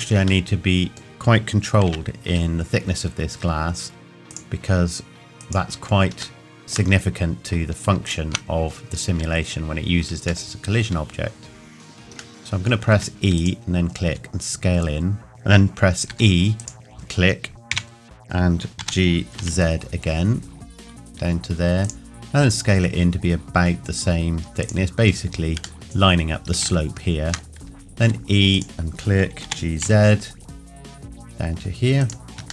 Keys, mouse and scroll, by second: 0.4 middle click, 1.9 KP_1, 2.3 z, 4.3 click, 6.4 shift+middle click, 8.0 alt+click, 10.5 shift+middle click, 12.9 e, 13.4 click, 14.1 s, 16.1 e, 16.6 click, 17.8 KP_1, 18.8 g, 21.8 click, 22.4 s, 24.6 click, 25.0-25.6 scroll up 1, 25.8 click, 26.8 shift+middle click, 28.0 e, 28.5 click, 29.4 g, 32.0 click.